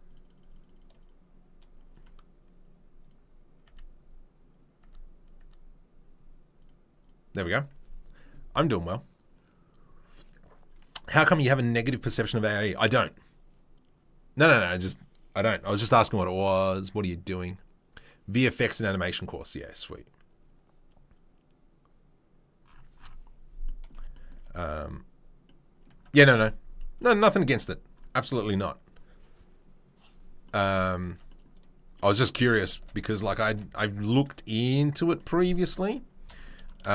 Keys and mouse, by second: 3.1-6.5 middle drag, 3.6 Tab, 4.8 Tab, 6.5-24.3 right drag, 31.0 Tab, 33.4 ctrl+r, 34.8-36.9 middle drag.